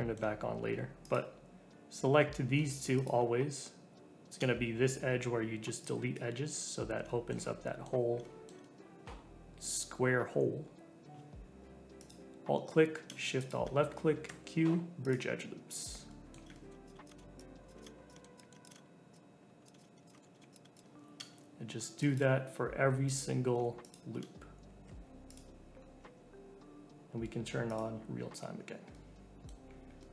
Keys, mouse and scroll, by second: 1.0 click, 2.9 shift+click, 4.3 Delete, 7.0-11.6 shift+middle drag, 11.9 alt+click, 13.4 alt+shift+click, 14.2 q, 15.6 scroll down 2, 16.1 middle click, 16.8 click, 17.0 shift+click, 17.2 Delete, 17.6 alt+click, 17.8 alt+shift+click, 17.9 q, 18.1 shift+middle click, 18.3 click, 18.4 middle click, 18.6 shift+click, 18.7 Delete, 19.6 alt+click, 19.7 alt+shift+click, 19.9 q, 20.1 shift+middle click, 20.5 click, 20.7 shift+click, 22.1 Delete, 23.0 alt+click, 23.8 alt+shift+click, 24.8 q, 25.7 scroll down 2, 26.0 Tab, 27.7 click, 28.1 Tab, 28.4 scroll down 2, 28.6 Tab, 28.9 middle click, 29.6-30.0 scroll down 3, 30.0 middle click.